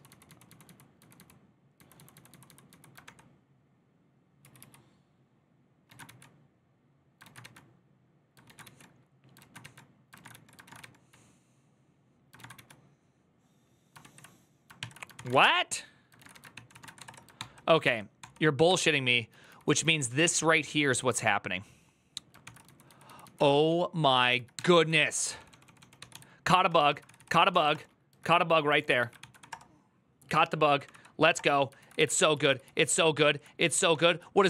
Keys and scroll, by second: 0.9 typing, 2.8 ctrl+d, 2.8 typing, 4.2 ctrl+u, 4.3 ctrl+u, 5.8 ctrl+a, 5.8 2, 7.0 ctrl+a, 7.2 1, 8.2 ctrl+a, 8.4 2, 9.2 ctrl+a, 9.4 1, 9.9 ctrl+a, 10.1 ctrl+a, 12.2 ctrl+a, 12.3 ctrl+a, 13.8 ctrl+s, 14.6 ctrl+n, 14.8-17.3 typing, 15.9 ctrl+a, 16.3 ctrl+n, 17.6 ctrl+d, 18.4 ctrl+d, 18.8-20.5 typing, 22.2-29.7 typing, 28.6 ctrl+a, 30.6 Up, 30.7 Up, 31.1 Return, 31.6 ctrl+a, 31.7 [, 31.9 ctrl+u, 32.1 ctrl+u, 32.4 ctrl+u, 33.7 ctrl+u, 33.7 ctrl+d.